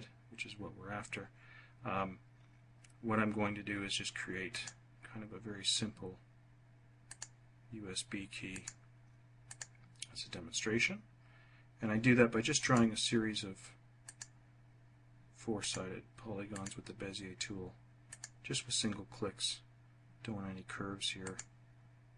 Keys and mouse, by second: 4.4 click, 7.0 click, 8.4 click, 9.3 click, 12.5 click, 13.9 click, 15.5 click, 16.3 click, 17.9 click, 21.1 click.